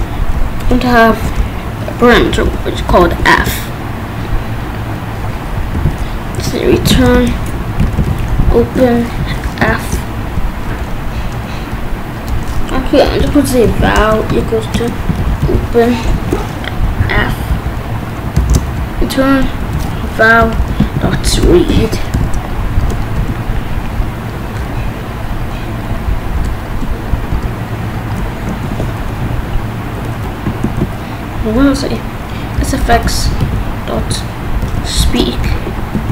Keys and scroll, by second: 1.1 Right, 2.3 shift+', 2.8 BackSpace, 3.0 shift+;, 3.4 Return, 5.7-9.2 typing, 9.6 Right, 12.8 Up, 13.2 Return, 13.4-16.1 typing, 17.2 f, 17.5 Right, 18.2 Down, 18.4 Right, 18.8 BackSpace, 19.9-23.1 typing, 22.8 Return, 26.3 Return, 26.7 BackSpace, 27.3 Return, 28.6 ctrl+s, 30.6 ctrl+s, 31.6 s, 32.6 Return, 32.9 ., 33.3 s, 35.0 shift+9, 35.9 ctrl+s.